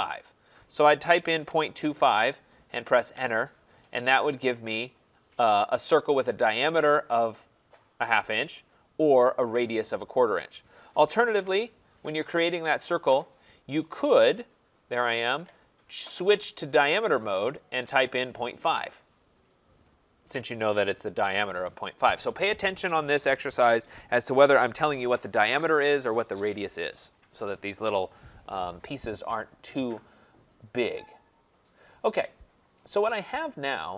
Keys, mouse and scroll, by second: 1.2-2.4 typing, 3.1 Return, 4.9-6.8 middle drag, 4.9-6.6 scroll, 6.8-9.0 drag, 9.0-10.0 scroll, 11.4 Delete, 13.0 click, 14.2 click, 17.2 click, 20.2 Return, 23.1 Return, 30.2-31.5 scroll, 31.5-32.2 scroll, 32.8 right click.